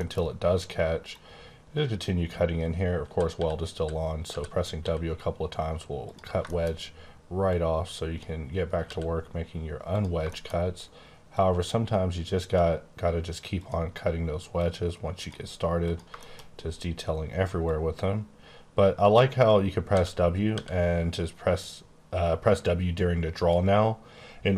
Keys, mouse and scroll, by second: 0.2-1.1 scroll up 1, 1.1 click, 3.0-4.8 typing, 6.0 click, 6.4 shift+middle click, 7.4 click, 8.6 click, 8.8 w, 9.9 click, 10.3 shift+middle click, 10.5-11.3 scroll down 1, 11.3 click, 13.5 click, 14.6 click, 15.8 click, 16.1 shift+scroll down 1, 16.4 middle click, 17.6 click, 19.9-20.5 typing.